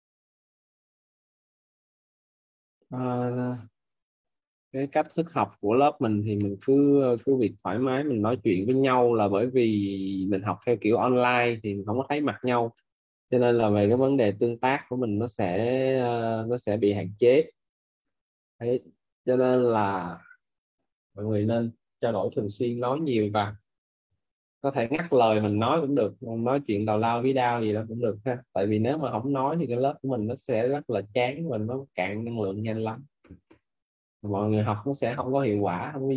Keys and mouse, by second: 4.8 click, 10.5 click, 13.2 click, 19.6 click, 22.3-25.0 typing, 26.8 click, 31.1 click, 34.0 click.